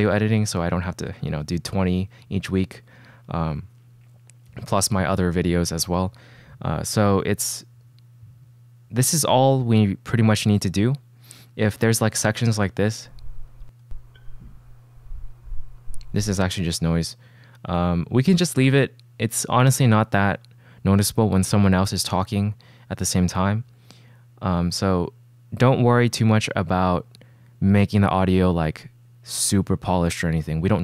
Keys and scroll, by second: 13.0 space, 16.3 space.